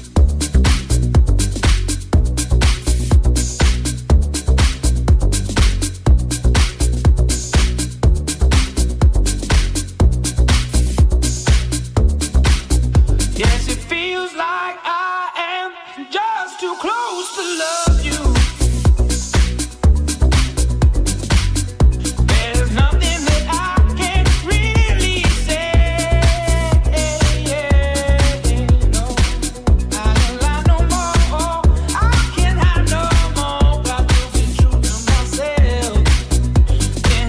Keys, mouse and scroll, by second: 8.7 c, 20.8 c, 24.9 shift+right click, 25.0 click, 26.1 click, 27.0-29.1 drag, 29.8-37.2 drag, 30.5 c.